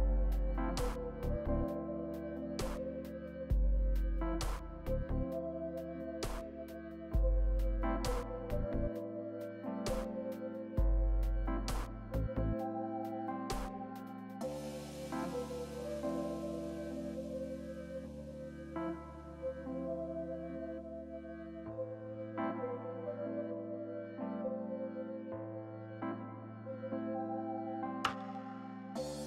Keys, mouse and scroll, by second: 0.0-0.3 scroll down 4, 0.3 middle click, 21.3-22.9 scroll up 2, 22.9-23.7 scroll down 1.